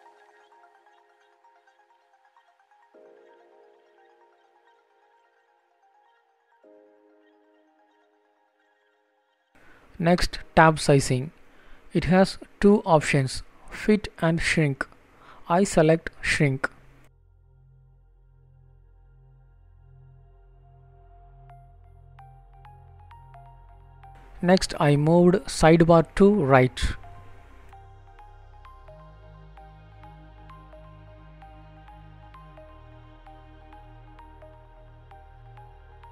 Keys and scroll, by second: 3.8 End, 11.5 Return, 12.7 Down, 13.4 Return.